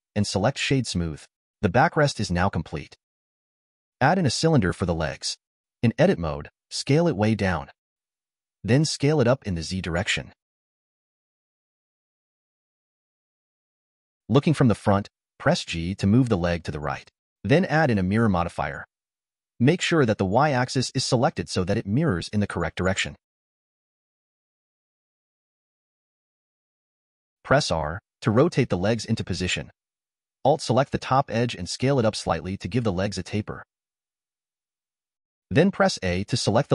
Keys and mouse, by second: 1.7-3.1 drag, 3.5 shift+a, 6.7 Tab, 7.7 s, 10.3 click, 11.5 s, 15.0 g, 19.1-20.6 drag, 22.9 click, 23.4 click, 27.5 r, 32.6 s, 35.9 a.